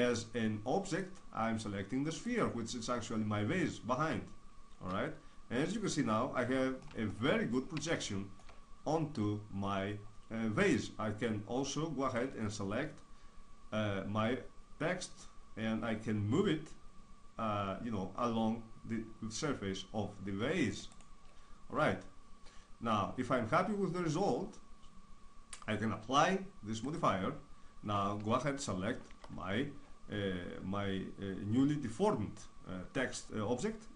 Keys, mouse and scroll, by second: 0.8-2.6 drag, 3.6-10.0 middle drag, 12.1-17.6 drag, 21.7-24.4 middle drag, 26.8-29.1 drag, 29.1 Tab.